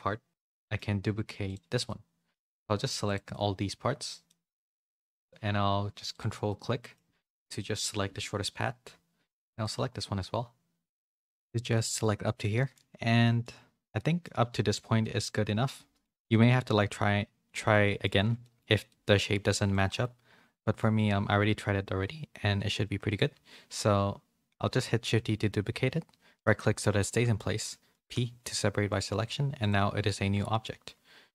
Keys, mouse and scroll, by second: 0.3 ctrl+z, 0.3 Tab, 0.5 shift+middle click, 1.1 2, 1.8 middle click, 2.5 2, 3.3 middle click, 4.4 middle click, 6.1 ctrl+click, 6.4 middle click, 7.8 KP_7, 11.7 middle click, 12.5 shift+middle click, 13.9 middle click, 15.0-16.0 middle drag, 16.2 shift+middle click, 17.7 middle click, 18.4 shift+middle click, 18.8 middle click, 19.7 middle click, 20.5 middle click, 24.8 shift+d, 29.2 Tab, 30.6 a.